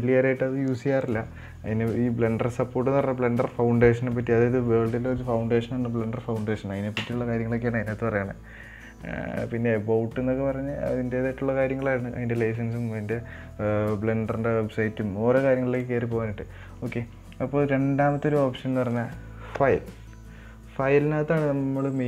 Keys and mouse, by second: 1.6-16.3 drag, 19.5 click.